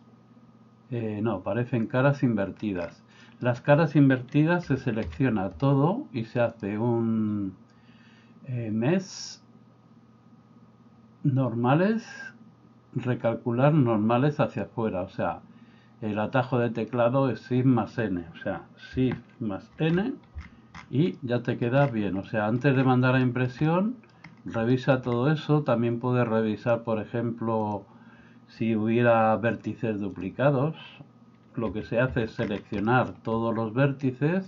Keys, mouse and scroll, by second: 0.0-2.6 middle drag, 3.2 middle click, 4.7 a, 5.1 a, 6.5-17.7 drag, 19.8 shift+n, 21.1 middle click, 22.3 middle click, 23.3 shift+middle click, 23.6 middle click, 24.8 shift+middle click, 26.7 click, 30.2 click, 32.1 a, 32.9 middle click.